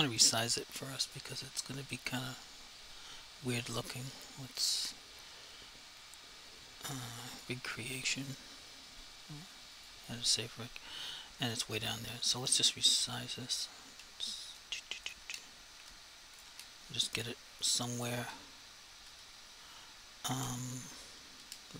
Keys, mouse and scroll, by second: 1.3 click, 4.5 click, 7.3 click, 9.8-12.7 scroll down 1, 12.8 s, 13.6 click, 13.9-16.5 typing, 15.1 click, 16.4 click, 18.3 /, 21.4 F3.